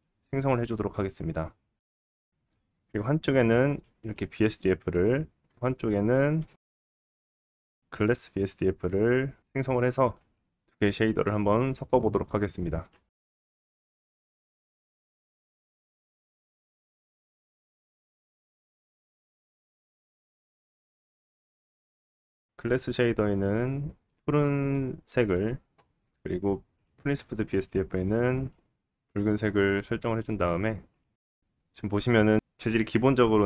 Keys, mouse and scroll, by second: 1.9-3.8 drag, 2.3 scroll down 1, 3.8 middle click, 4.4-4.9 scroll down 1, 4.9 scroll down 1, 5.0 click, 5.1-10.9 shift+middle drag, 5.3 shift+a, 7.4 s, 10.2 scroll up 1, 10.9-12.2 drag, 12.2-12.8 middle drag, 12.8-13.7 drag, 13.9 scroll up 3, 14.0-16.1 middle drag, 16.1-16.5 drag, 16.5 middle click, 16.7 click, 16.9-18.0 middle drag, 18.0 click, 18.2-18.7 middle drag, 18.7-20.8 drag, 20.8-33.4 middle drag, 24.2-25.6 scroll up 1, 25.6-26.4 scroll up 1, 27.9-29.9 scroll down 1.